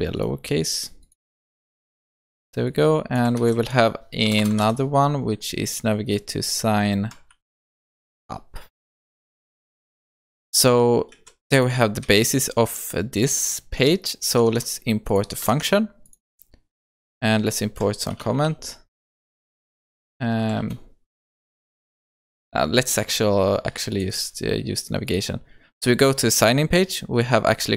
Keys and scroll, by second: 3.4 ctrl+c, 4.6 ctrl+v, 11.2 ctrl+s, 14.4 Tab, 20.6 ctrl+BackSpace.